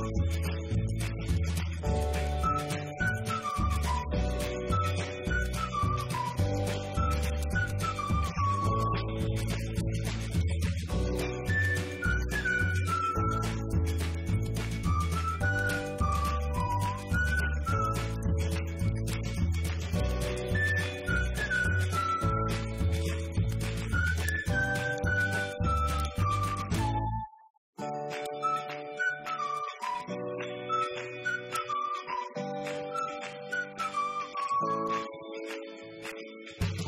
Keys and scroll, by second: 1.2 Return, 25.4 Delete, 31.0 shift+Down, 31.1 shift+Right, 32.2 Delete, 32.8 Right, 33.5 Left, 33.6 Up, 34.1 Left, 34.3 Up, 34.7 Right, 34.8 Down, 35.4 Left, 35.7 Up.